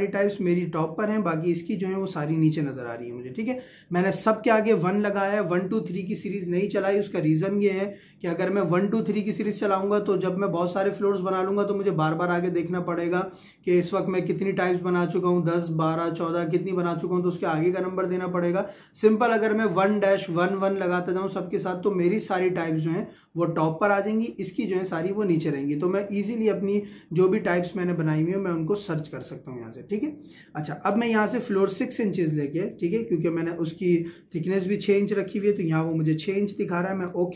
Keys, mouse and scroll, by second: 31.1 click, 37.1 click.